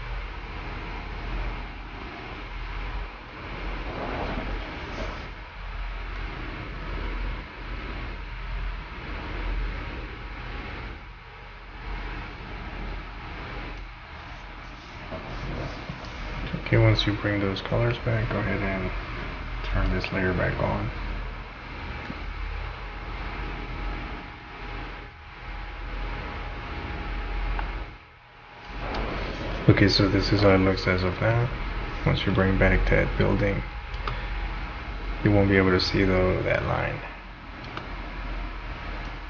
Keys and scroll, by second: 29.1 space, 34.0 space, 37.7 space.